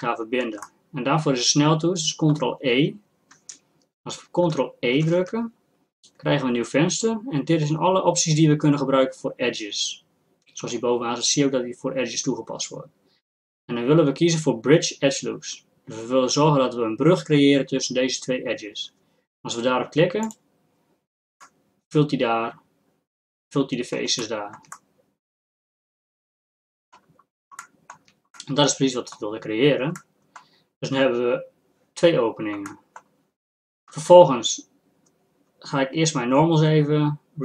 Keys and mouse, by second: 5.0 ctrl+e, 21.4-24.2 middle drag, 24.2-25.5 drag, 32.7-37.4 drag.